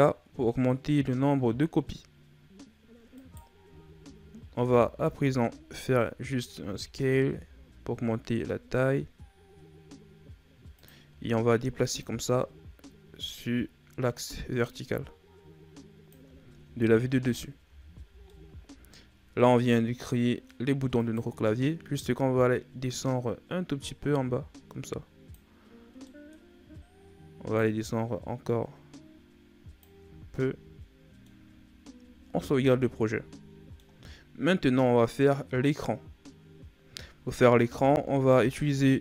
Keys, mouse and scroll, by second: 3.0 right click, 3.7-4.6 scroll up 2, 4.6 Tab, 6.6 s, 11.9 click, 16.5 Tab, 17.0-17.5 scroll down 4, 17.5 a, 18.0 scroll down 1, 18.2-19.5 middle drag, 19.5-20.1 scroll up 3, 20.1 middle click, 20.5-20.9 scroll up 2, 20.9 right click, 22.3 click, 25.9 middle click, 26.4-27.4 scroll up 1, 27.4 click, 29.9 a, 30.1 scroll down 1, 30.3-32.0 middle drag, 32.0 ctrl+s, 32.4 scroll down 3, 32.7-36.9 middle drag, 37.5 KP_1.